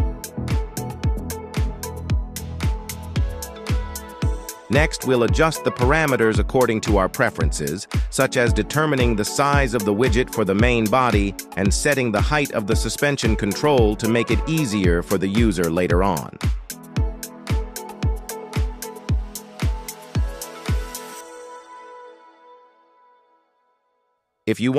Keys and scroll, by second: 10.0 KP_1.